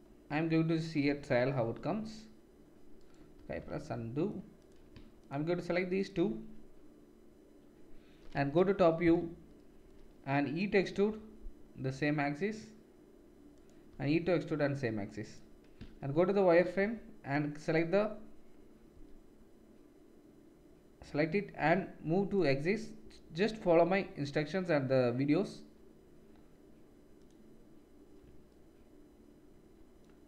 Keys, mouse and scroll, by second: 1.0 KP_7, 1.6 e, 3.1-5.2 ctrl+middle drag, 3.3 ctrl+z, 5.2 shift+click, 5.6 shift+middle click, 5.9 shift+click, 6.0 shift+middle click, 8.3 KP_7, 10.8 e, 13.9 e, 15.8 shift+z, 16.1-17.3 middle drag, 16.8 1, 17.3-22.4 drag, 18.9 g, 22.4-29.1 middle drag, 23.4 r.